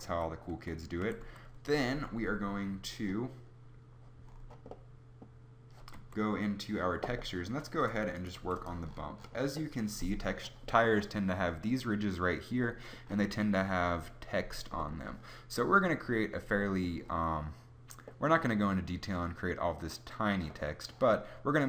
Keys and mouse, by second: 0.1 Tab, 0.5 Tab, 1.0 a, 1.2 a, 6.0 Tab, 8.3 g.